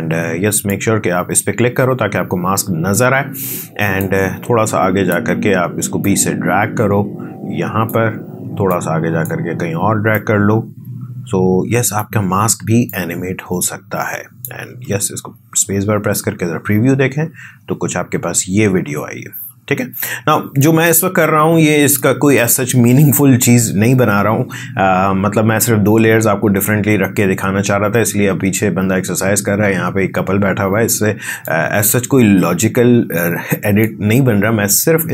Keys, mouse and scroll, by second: 0.5 click, 3.9-6.0 drag, 6.3-7.9 drag, 14.4 drag, 14.6 space, 19.3 space, 20.5-25.9 drag, 31.4-35.1 drag.